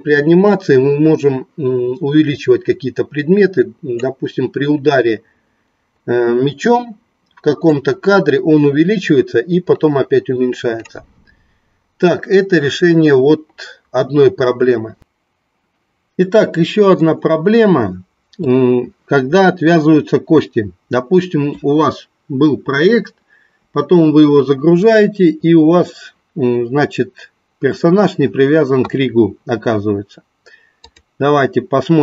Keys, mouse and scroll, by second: 7.7-10.9 drag.